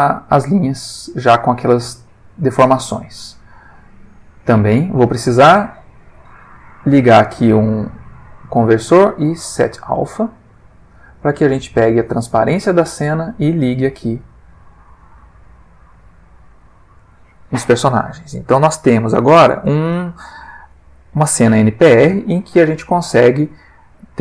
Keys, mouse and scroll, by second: 0.7-1.5 middle drag, 2.8 middle click, 3.7 click, 4.3 click, 6.1 shift+a, 9.9 click, 10.6 click, 11.7-13.5 drag, 14.6 click, 15.4 click, 15.9 click, 16.6-17.1 middle drag.